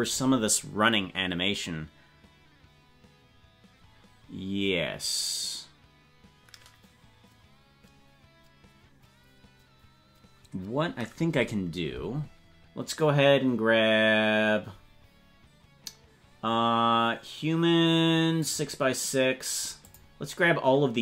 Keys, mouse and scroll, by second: 18.5 click, 19.9 click.